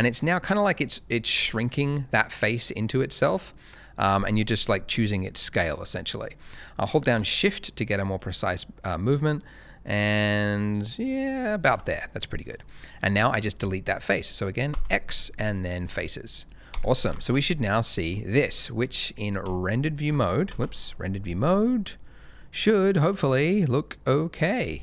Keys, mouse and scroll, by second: 11.8 shift+click, 11.9 middle click, 12.6 middle click, 12.9-14.6 scroll up 1, 14.6 x, 15.7 click, 16.7 Tab, 17.1 z, 17.6 middle click, 18.1-18.5 scroll up 1, 18.5 middle click, 19.4 shift+a, 20.5 z.